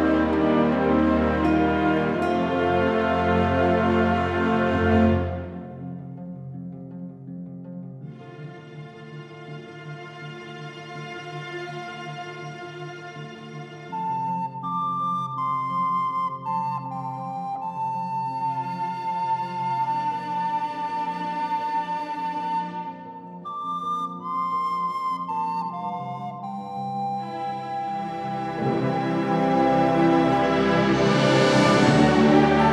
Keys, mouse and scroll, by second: 0.9 click, 2.1 click, 3.4 alt+a, 3.4 click, 3.7 scroll down 4, 3.9 scroll up 5, 4.0 middle click, 4.3 middle click, 5.3 alt+a, 5.3 scroll down 7, 5.5 shift+middle click, 5.7 scroll up 4, 5.8 middle click, 6.1 click, 6.4 scroll down 1, 6.5 middle click, 6.9 click, 7.3-8.1 scroll down 5, 7.6 click, 7.8 middle click, 8.1 click, 9.0 alt+a, 9.0 click, 9.2 middle click, 9.2 scroll down 7, 9.3 scroll up 1, 9.4 click, 9.7 KP_Decimal, 9.9-10.5 scroll down 7, 10.0 middle click, 10.4-10.8 scroll up 10, 10.9-11.5 scroll down 9, 11.1 shift+middle click, 11.5 alt+g, 11.6 scroll up 1, 11.9 KP_Decimal, 12.0-12.7 scroll down 3, 12.4 click, 12.8 middle click, 12.9 shift+middle click, 13.1 middle click, 13.2 shift+middle click, 13.5 click, 13.7-14.2 scroll down 8, 13.8 middle click, 14.1 middle click, 14.2-15.4 scroll up 6, 14.3 middle click, 14.5 click, 15.0 alt+a, 15.2 middle click, 15.4 click, 15.8 click, 16.1 scroll down 2, 16.1 shift+middle click, 16.4 click, 16.9 click, 17.4-17.9 scroll down 8, 17.7 scroll up 3, 18.0 middle click, 18.1 shift+middle click, 18.3 scroll up 1, 18.3 middle click, 18.6 shift+right click, 18.9 shift+s, 19.8 r, 21.4-21.8 scroll up 4, 21.8 click, 22.0 KP_Decimal, 22.1-22.5 scroll down 3, 22.2 middle click, 22.5 click, 23.1 middle click, 23.5 alt+d, 23.9 middle click, 24.1 click, 24.4 middle click, 24.7 click, 25.0 alt+z, 25.1 alt+z, 25.3 click, 25.5 middle click, 26.1 r, 26.9 right click, 27.6 middle click, 27.8 click, 28.4 r, 29.0 middle click, 29.4 click, 30.2 r, 31.0 r, 32.5 click.